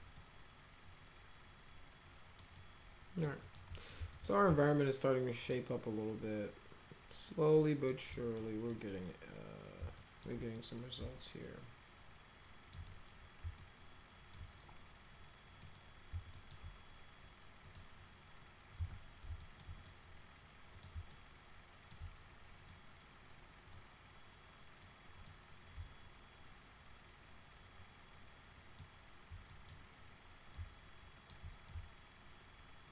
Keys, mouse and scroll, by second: 0.1-2.4 alt+middle drag, 2.6-3.2 alt+middle drag, 3.4 alt+middle click, 3.8 middle click, 4.1 alt+middle click, 4.4-5.5 alt+middle drag, 5.7-7.9 alt+middle drag, 8.1 middle click, 8.7 middle click, 10.0 alt+middle click, 10.6-12.8 middle drag, 12.8 middle click, 13.1 scroll up 2, 13.4 scroll down 3, 13.6 alt+middle click, 15.6 middle click, 16.3 alt+middle click, 17.6 click, 18.8 z, 19.4 alt+middle click, 19.8 right click, 20.7 click, 21.1 alt+middle click, 22.7 middle click, 23.7-24.8 middle drag, 25.3-28.6 middle drag, 29.5 middle click, 30.5 alt+middle click, 31.7-32.9 alt+middle drag.